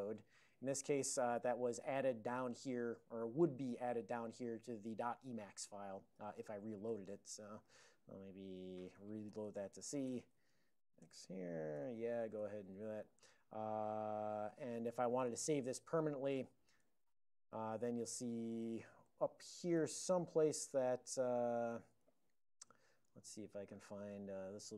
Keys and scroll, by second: 0.2 alt+o, 1.0 alt+>, 7.0 ctrl+x, 7.2 ctrl+v, 7.3-11.8 typing, 11.1 Return, 12.5 alt+>, 14.9 alt+o, 15.7 ctrl+x, 16.0 ctrl+s, 16.9 y, 19.8 alt+o, 20.6 alt+v, 22.1 alt+v.